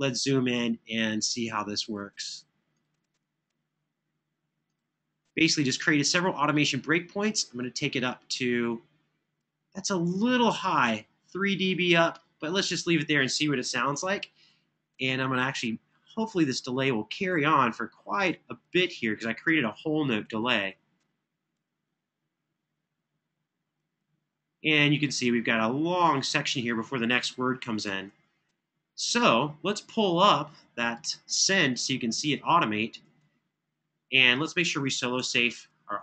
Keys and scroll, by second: 13.7 super+[, 27.4 super+[, 27.6 super+[, 29.8 super+=, 32.8 super+=.